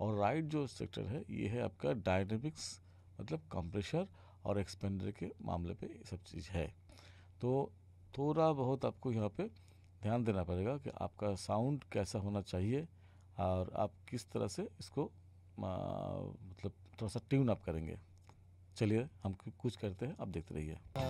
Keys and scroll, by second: 20.8 space.